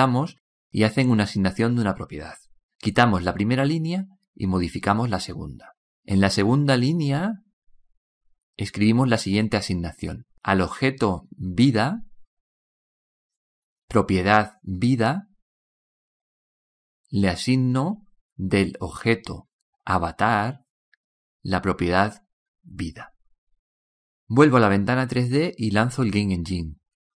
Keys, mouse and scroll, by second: 24.2 click, 24.2 shift+v, 24.2 i, 24.2 d, 24.2 a.